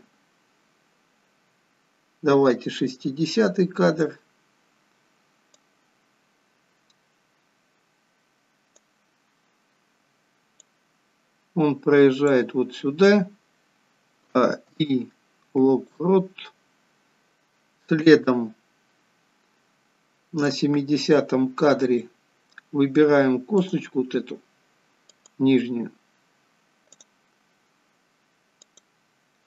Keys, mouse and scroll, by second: 5.6 click, 9.0-10.1 scroll down 3, 10.8 click, 14.2 a, 14.7 i, 18.1 click, 21.9 middle click, 23.6 click, 25.1 click, 27.0 click, 27.4-27.8 scroll up 4, 27.9 scroll down 2, 28.6 click.